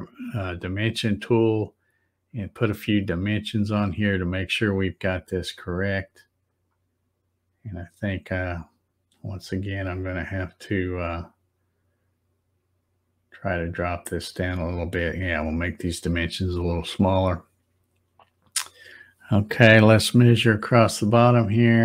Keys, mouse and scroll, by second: 2.2 click, 4.6 click, 6.4 click, 8.1 click, 11.1 click, 13.8 click, 17.0 click, 21.0 click.